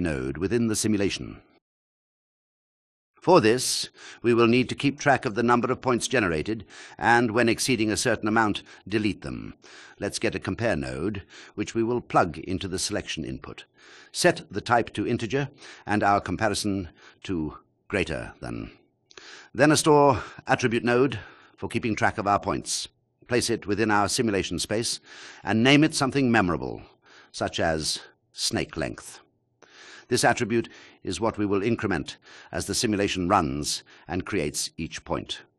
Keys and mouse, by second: 0.2 click, 3.2-3.5 drag, 7.1 shift+a, 8.0 BackSpace, 9.8 Return, 10.6-11.6 drag, 11.9-12.5 drag, 12.8-13.5 drag, 13.8 click, 14.8 click, 15.5 shift+click, 17.5 shift+a, 21.0 click, 22.4 click, 25.0 click, 25.3-28.3 shift+drag, 25.3 BackSpace, 31.5 shift+a.